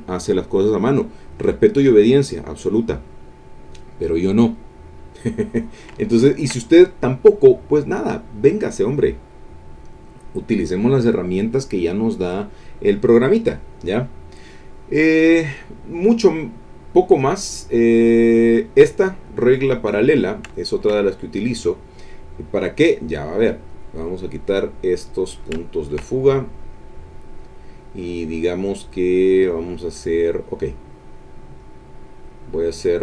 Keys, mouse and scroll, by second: 5.6-6.6 drag, 14.3 click, 15.5 click, 19.1 click, 20.2-21.6 ctrl+middle drag, 23.5 click, 24.1 middle click, 25.1 click, 25.6 ctrl+middle click, 25.6-26.1 ctrl+scroll up 2, 26.3 ctrl+middle click, 26.3-26.6 ctrl+scroll up 3, 26.6 click, 27.6 middle click, 27.6-28.2 scroll up 2, 31.6-33.0 drag.